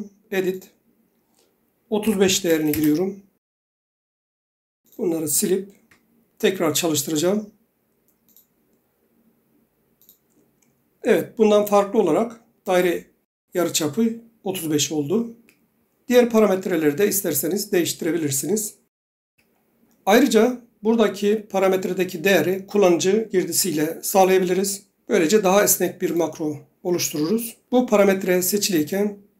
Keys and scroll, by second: 2.0-2.9 typing, 6.0 Delete, 15.5 Escape, 19.4 Escape.